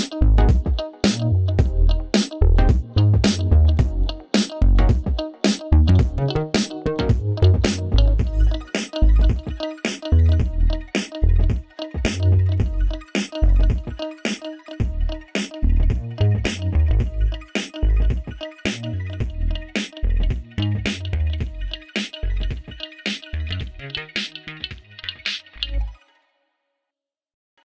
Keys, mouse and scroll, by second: 6.6 click, 9.0-15.1 drag, 15.3 space, 19.6-21.9 drag, 23.5 click.